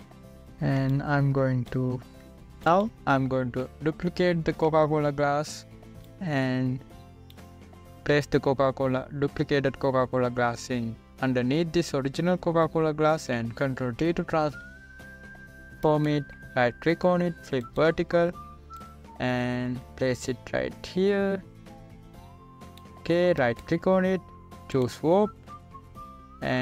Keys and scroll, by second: 0.0 space, 6.2 ctrl+j, 15.6 ctrl+t.